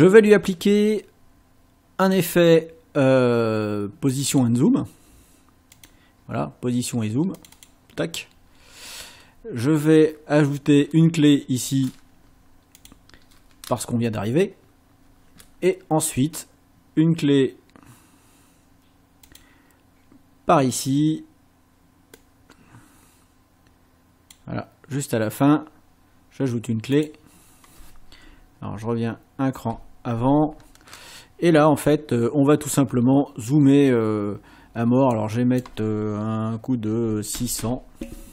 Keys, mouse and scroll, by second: 2.1 click, 4.1 click, 5.8 click, 7.4 click, 12.8 click, 19.3 click, 22.2-24.5 drag, 27.0 click, 28.7 Left, 35.2 click, 36.9 KP_6, 37.4 KP_0.